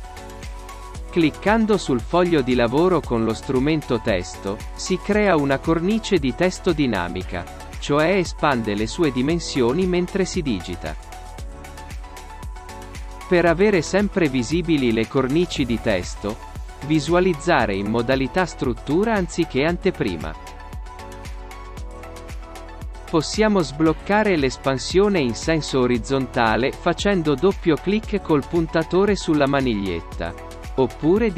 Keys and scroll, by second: 20.4 space.